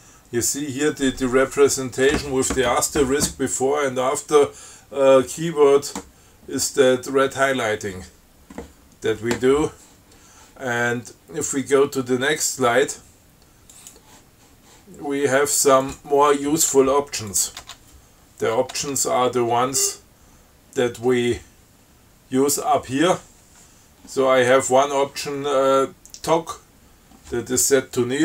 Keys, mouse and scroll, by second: 14.0 click, 16.1 click, 17.6 click, 17.9 Tab, 19.0 Tab, 19.7 scroll up 2.